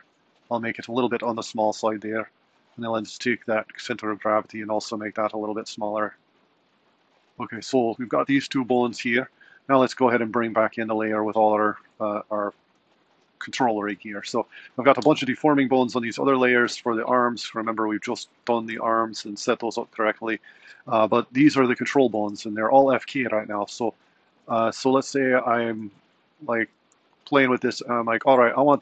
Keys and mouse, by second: 2.5 click, 6.0 typing, 11.9 click, 20.5 click, 22.4 r, 24.7 r, 26.3 click, 27.0 r.